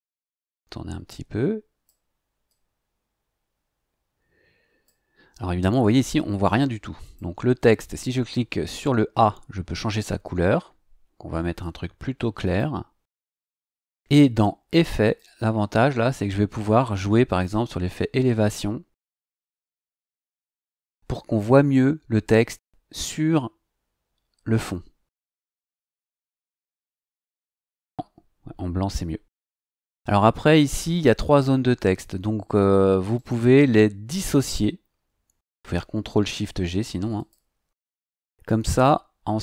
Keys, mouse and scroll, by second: 0.5-2.0 drag, 2.5-5.0 drag, 7.0 click, 12.4 click, 15.0 click, 17.3 click, 27.2 click, 27.9 click, 33.1 right click, 37.1 click, 38.7 click.